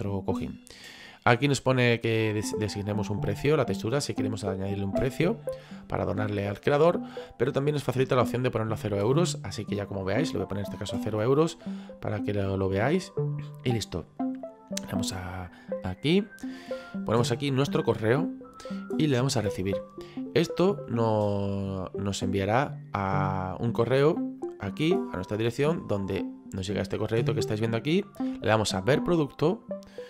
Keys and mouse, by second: 11.1 KP_0, 15.6 click, 24.4 click, 25.8 click, 27.0 click, 29.8 click.